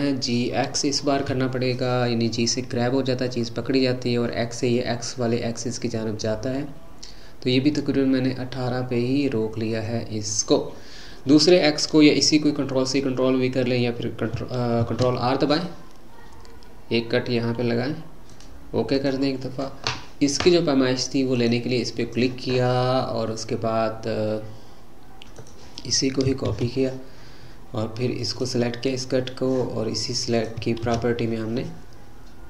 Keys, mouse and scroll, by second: 14.8 ctrl+r, 21.3 click, 25.3-28.4 drag, 28.9 click, 30.3-32.4 drag.